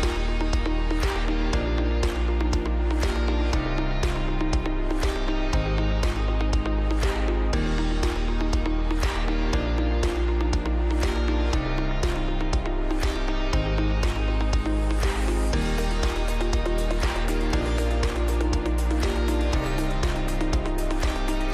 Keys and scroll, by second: 7.1 F3, 13.7 space, 15.6 shift+Page_Down, 16.2 Escape, 17.4 ctrl+g, 17.7-18.6 typing, 18.6 Escape, 21.2-21.5 typing.